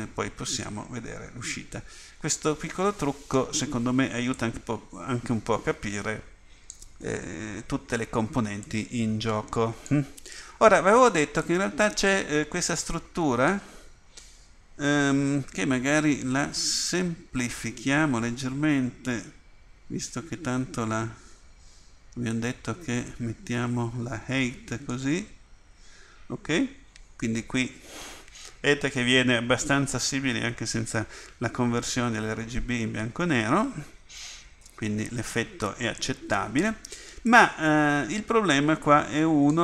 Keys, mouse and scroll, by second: 4.3-13.5 drag, 19.5 Delete, 22.3-22.8 drag, 37.3-38.7 right drag.